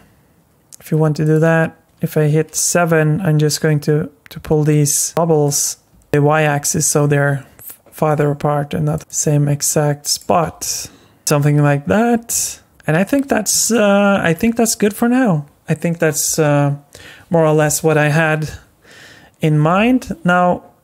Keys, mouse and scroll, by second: 1.4 s, 1.9 middle click, 1.9 KP_7, 3.0 g, 5.4 click, 5.9 g, 6.5 g, 8.9 click, 9.1 g, 10.1 click, 10.4 g, 11.3-11.8 scroll down 2, 11.8 scroll up 2, 12.1 scroll down 1, 12.7-13.5 scroll up 1, 13.7 shift+middle click, 14.6 scroll up 1, 15.4 scroll down 1.